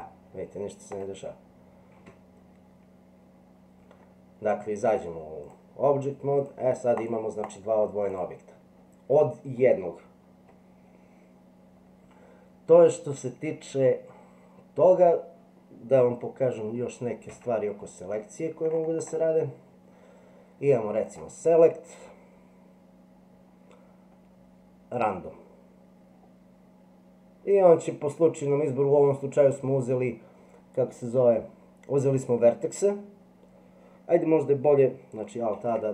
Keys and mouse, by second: 1.0-2.3 right drag, 5.6-6.5 drag, 7.0 click, 7.4 click, 17.3 Tab, 21.1-25.0 drag, 35.6 alt+a.